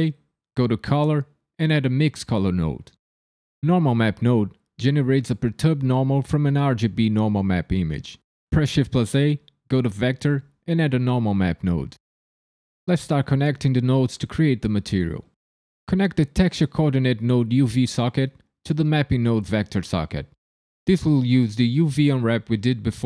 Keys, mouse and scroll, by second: 4.2 click, 8.5 shift+a, 13.1 click, 17.8 click.